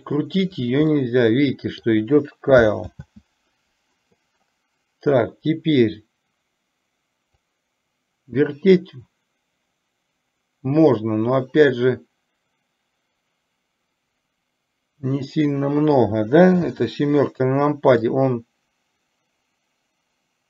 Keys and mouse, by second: 1.0-1.9 middle drag, 3.0 ctrl+z, 7.5-15.2 drag, 18.0-20.4 drag.